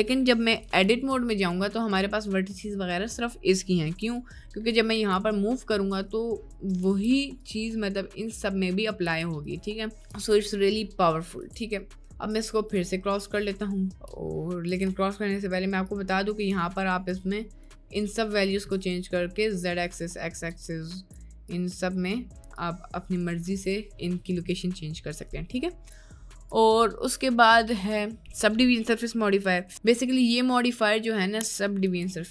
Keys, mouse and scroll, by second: 0.6 Tab, 1.0 middle click, 1.4 right click, 3.8 1, 4.7 right click, 5.0 g, 6.8 g, 8.1 middle click, 8.8 middle click, 9.1 g, 10.2 g, 11.5 Tab, 13.2 click, 14.7 ctrl+z, 16.0 click, 17.2 click, 18.2 middle click, 19.0 middle click, 20.6 click, 21.4 click, 22.6 click, 24.4 middle click, 25.8 click, 26.6-30.3 drag.